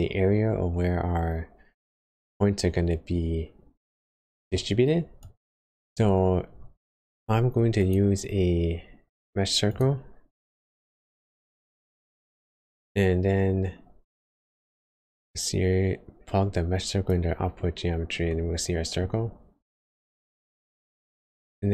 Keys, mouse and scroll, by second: 3.9 middle click, 5.2 click, 6.5 shift+a, 12.4 click, 18.2 middle click, 19.1 scroll up 1, 21.3-21.7 scroll up 3.